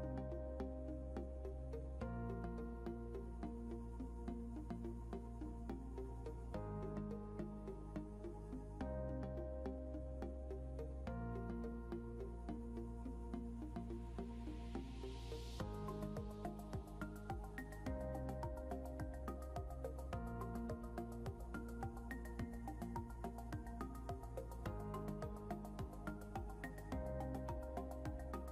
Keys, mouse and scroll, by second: 10.3 double click, 11.1 scroll up 1, 13.6 right click, 23.9 scroll up 1.